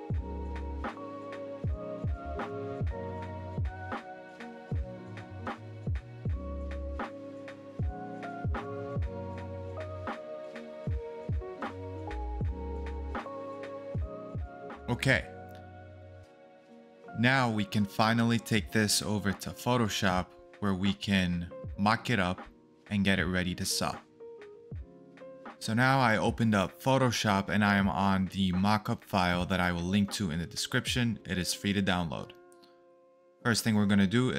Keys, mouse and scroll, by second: 0.3 ctrl+v, 3.9-4.8 scroll up 1, 4.8-5.6 scroll down 1, 10.3 double click.